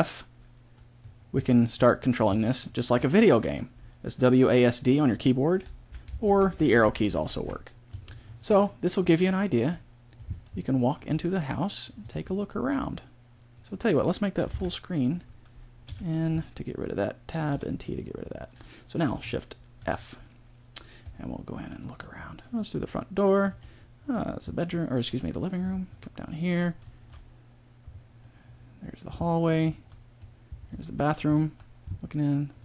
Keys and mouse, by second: 14.5 ctrl+Up, 15.8 n, 17.4 t, 19.8 shift+f.